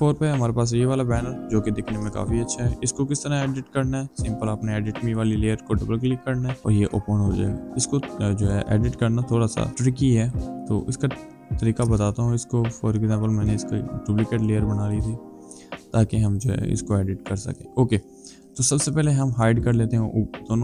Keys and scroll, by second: 11.6 ctrl+g, 12.5 ctrl+j.